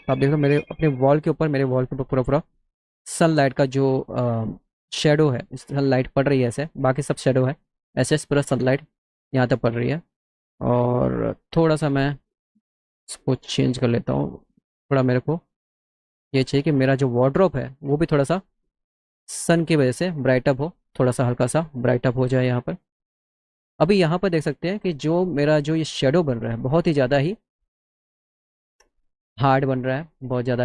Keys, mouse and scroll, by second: 1.4 click, 12.2 click, 13.3-14.3 drag, 16.6 click, 22.1 click, 24.7 click, 25.2 middle click, 30.1 middle click.